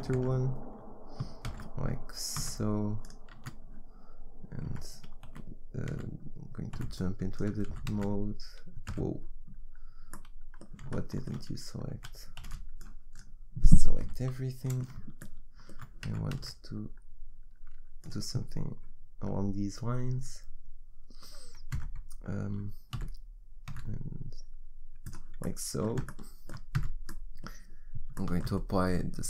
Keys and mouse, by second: 0.2 Tab, 1.5 shift+d, 3.4 z, 4.8 Tab, 5.3 a, 5.9 z, 6.8 b, 7.7 e, 11.9 a, 12.5 b, 14.0 KP_1, 16.1 g, 21.8 Tab, 22.9 s, 26.1-29.2 drag, 26.8 z.